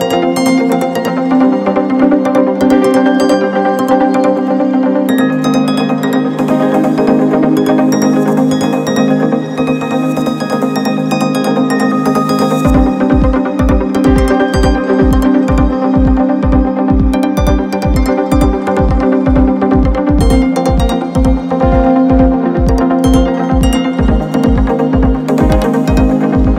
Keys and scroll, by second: 2.9 Return.